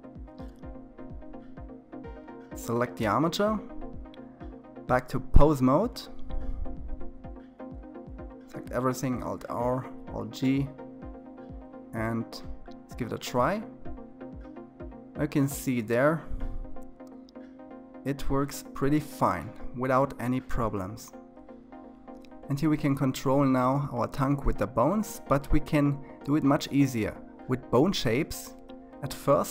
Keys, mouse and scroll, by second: 4.3-5.0 drag, 5.0-6.0 scroll up 2, 6.0 a, 7.7 alt+r, 8.5 alt+g, 10.9 click, 12.8 r, 21.3-22.0 middle drag, 22.0 r, 24.1 KP_3, 28.4-29.5 drag.